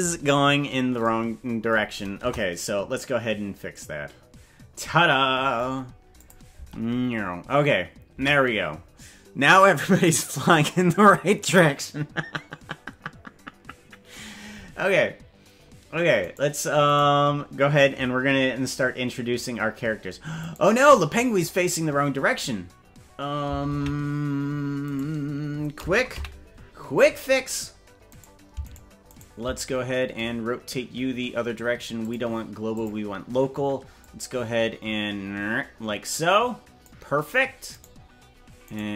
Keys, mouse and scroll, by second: 2.2 KP_0, 3.6 scroll down 1, 6.2 click, 6.6 space, 8.2 space, 16.2 right click, 17.0 right click, 20.4 right click, 23.7 ctrl+Tab, 24.9 right click, 26.1 KP_Decimal, 26.7-27.9 scroll down 13, 28.2 right click, 28.7 shift+right click, 29.1 shift+right click, 32.0-33.0 drag, 34.0-36.9 drag, 37.9 right click, 38.7 right click.